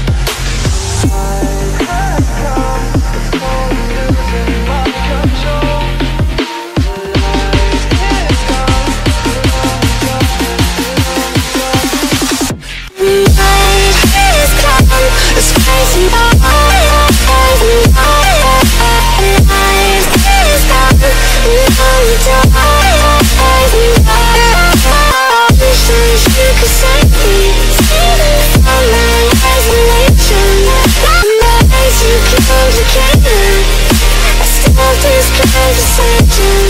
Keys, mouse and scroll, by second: 0.1 click, 2.7-3.9 click, 3.4 click, 3.5 click, 4.0 click, 4.2-5.0 ctrl+click, 4.4 click, 4.6 click, 6.0 shift+click, 6.7 click, 8.6 click, 9.4 alt+click, 10.1 click, 13.2 click, 13.5 ctrl+z, 15.1 click, 16.0 alt+click, 16.6 click, 19.0 click, 20.1 alt+click, 20.5 click, 20.7 click, 20.8 click, 21.0 alt+click, 22.1 ctrl+click, 22.3 ctrl+click, 22.4 click, 22.6 click, 22.9 click, 24.5-26.8 shift+click, 26.1 click, 26.3 click, 26.4 click, 26.7 click, 27.8 click, 28.1 ctrl+click, 28.4 click, 28.8 ctrl+click, 31.9 click, 32.8 alt+click, 33.3 ctrl+alt+z, 33.6 alt+click, 34.2 click.